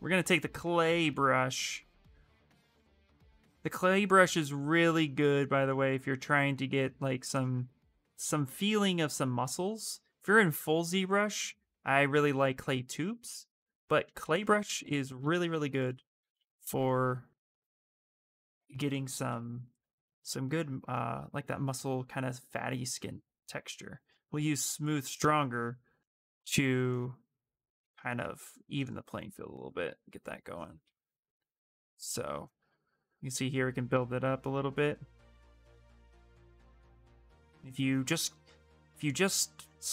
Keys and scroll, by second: 0.3-1.2 typing, 15.7 shift+space, 19.4 ,.